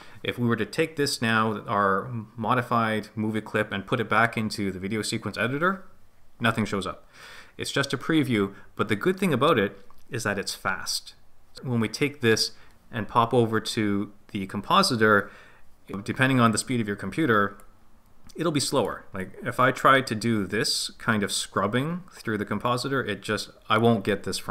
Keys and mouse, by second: 17.6-18.9 drag, 19.2-24.5 drag.